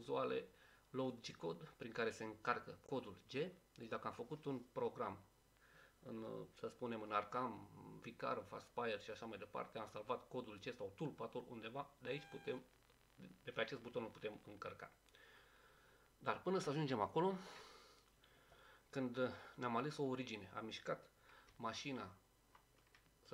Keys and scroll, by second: 21.5 Down, 22.0-22.5 typing.